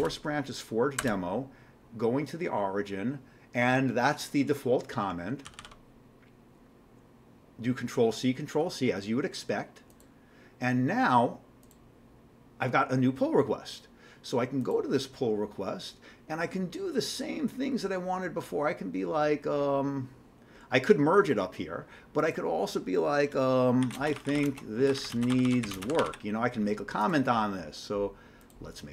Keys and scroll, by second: 0.0 Return, 1.0 Return, 5.5 ctrl+c, 5.6 ctrl+c, 23.6-26.6 typing.